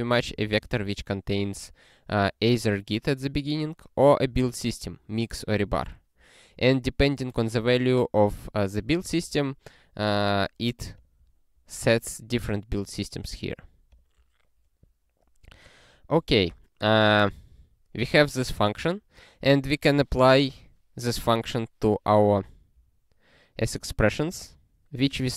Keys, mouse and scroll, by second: 0.4 ctrl+g, 2.1 click, 4.2 click, 4.3 double click, 7.9 click, 10.2 click, 12.5 click, 13.7 click, 13.9 click, 15.0 scroll down 1, 17.4 click, 22.9 scroll down 1.